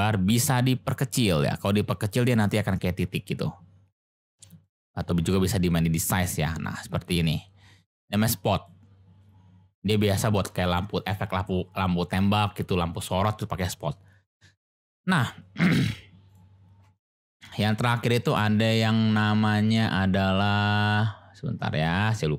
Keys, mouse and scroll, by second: 4.6-8.7 drag, 15.8 x, 16.9 shift+click, 17.6 shift+a.